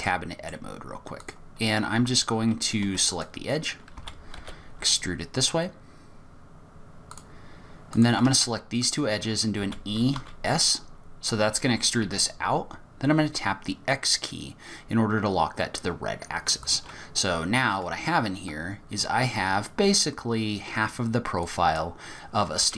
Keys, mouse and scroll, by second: 0.0 middle click, 1.2 click, 2.8 2, 3.2 click, 3.9 e, 7.9 click, 8.8 shift+click, 9.6 e, 17.3-17.8 scroll down 2, 21.4 click, 22.6 g.